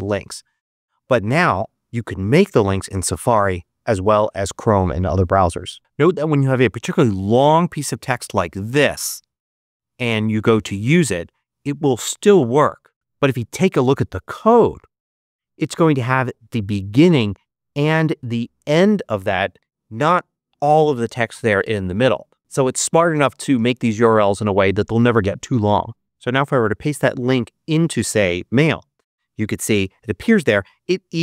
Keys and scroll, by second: 13.5 super+v, 28.6 super+v.